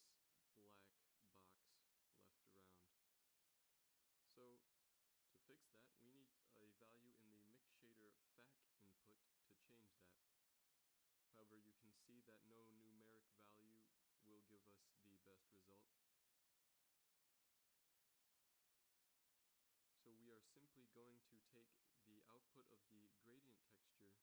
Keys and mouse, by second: 0.7 z, 1.3 z, 2.2-4.7 middle drag, 4.9 shift+z, 6.3-7.7 middle drag, 16.5-18.3 drag, 19.4 z, 20.5 click, 22.7 shift+a.